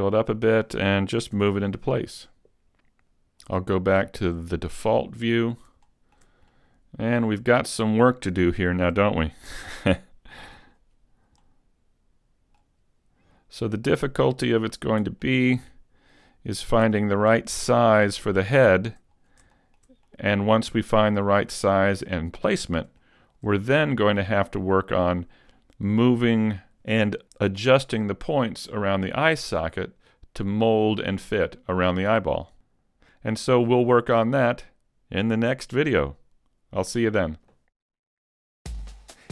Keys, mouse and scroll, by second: 1.4 click, 1.4 g, 3.7 click, 5.5-5.9 scroll up 1, 5.9 shift+middle click, 6.4-7.0 scroll up 1, 7.0 middle click, 8.4 shift+middle click, 8.9-9.3 shift+scroll up 1, 9.5 s, 11.4 middle click, 13.6 click, 15.2 middle click, 17.0 shift+middle click, 17.7-18.2 scroll up 1, 18.2-18.7 scroll down 2, 18.7 shift+middle click, 18.7-19.1 scroll down 1, 19.1-19.6 scroll up 1, 19.6 shift+middle click, 20.1 middle click, 21.5 middle click, 23.0 shift+middle click.